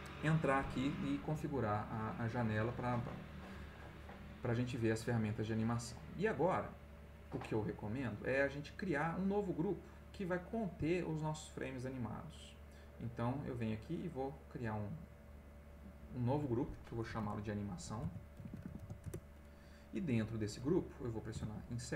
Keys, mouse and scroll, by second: 5.4-7.1 drag, 13.3 click, 14.7 click, 15.9 click, 17.2-19.3 typing, 21.3 Insert.